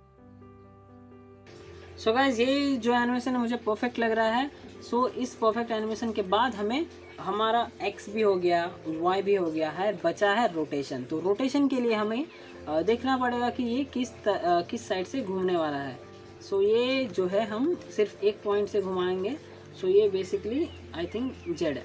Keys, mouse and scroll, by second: 0.2 scroll down 1, 0.5 alt+click, 0.8 alt+scroll down 1, 0.9 alt+drag, 6.8 click, 7.6 alt+scroll up 1, 7.9 alt+click, 8.2 alt+middle click, 8.6 alt+click, 15.8-16.4 click, 16.4 alt+scroll up 1, 16.7 alt+middle click, 17.0 alt+scroll up 1, 17.3 alt+middle click, 17.6 alt+scroll up 1, 17.8 alt+click, 19.1 click, 20.2 e, 21.5-21.8 alt+drag.